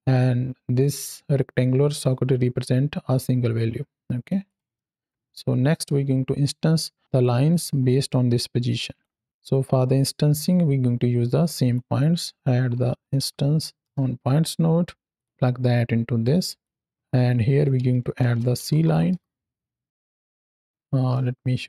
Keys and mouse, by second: 0.1-4.2 drag, 4.6 middle click, 7.1-8.9 drag, 9.8-11.6 drag, 15.0 click, 16.5 click, 17.2-17.5 drag, 19.8 click, 20.0 click.